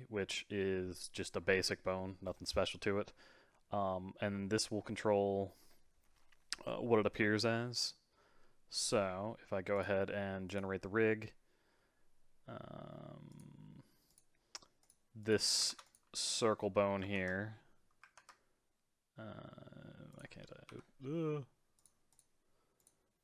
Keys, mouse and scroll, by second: 9.7 click, 10.5-11.7 drag, 11.7-13.3 scroll down 2, 13.3 click, 14.1 click, 14.8 click, 15.2 click, 15.7 ctrl+Tab, 16.8 middle click, 17.2 ctrl+Tab, 18.1 ctrl+Tab, 20.7 Escape, 21.8-22.9 drag.